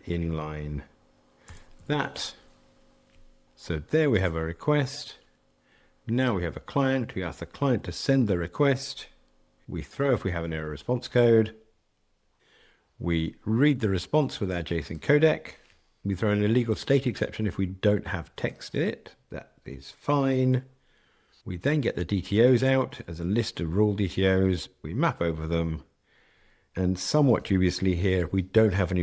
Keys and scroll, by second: 1.6 alt+super+n.